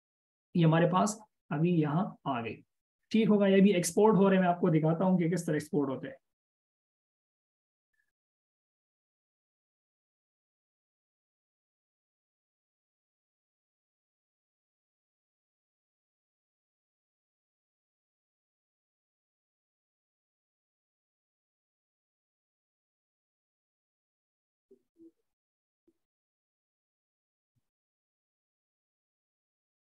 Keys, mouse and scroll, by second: 29.6 double click.